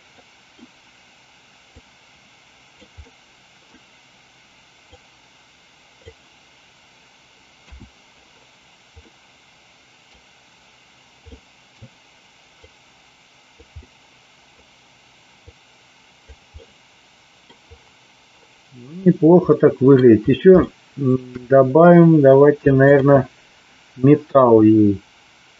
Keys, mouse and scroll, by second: 0.0 middle click, 1.8-2.8 drag, 3.0 middle click, 4.9-6.0 drag, 7.6 KP_1, 9.0-10.0 middle drag, 11.3 middle click, 12.5-13.5 drag, 13.8 middle click, 15.4 click, 16.7-17.5 middle drag, 19.4-19.9 middle drag, 20.6-21.1 shift+middle drag, 22.8 click.